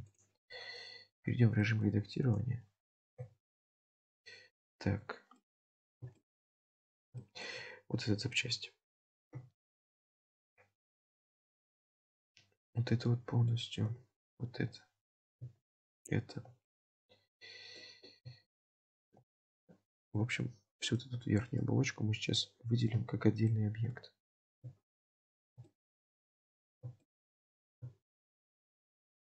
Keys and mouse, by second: 0.1 click, 1.7 shift+middle click, 2.3 click, 3.2 l, 4.1 click, 5.0 3, 5.4 middle click, 6.1 shift+middle click, 7.2 shift+middle click, 9.3 KP_7, 11.2 3, 11.8 alt+click, 12.8 middle click, 14.2 alt+shift+click, 14.8 middle click, 16.0 alt+shift+click, 16.7-17.8 middle drag, 18.7 alt+shift+click, 19.4 middle click, 21.6-23.0 middle drag, 23.0 shift+click, 23.9 middle click, 24.6 shift+click, 25.7-26.8 middle drag, 27.1 shift+middle click, 28.4 alt+shift+click.